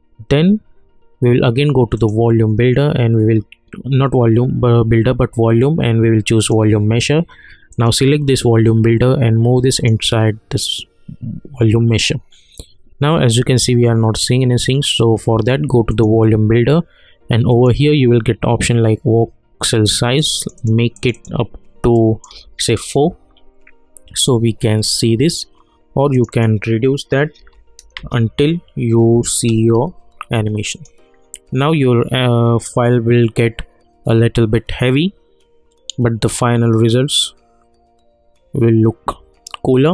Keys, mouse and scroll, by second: 1.9 click, 6.4-10.6 drag, 15.9 click, 20.1 click, 24.7 scroll up 1, 26.1 click, 27.9 Return, 30.7 click.